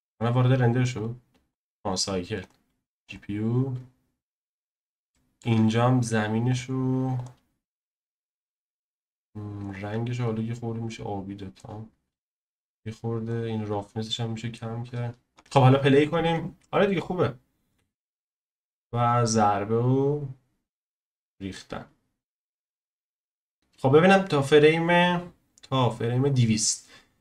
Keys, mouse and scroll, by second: 0.2 z, 2.0-4.7 drag, 5.1-7.2 shift+middle drag, 7.2-10.2 drag, 12.7-15.3 drag, 15.3 scroll down 1, 15.4-18.4 drag, 22.8 click, 26.3-27.2 drag.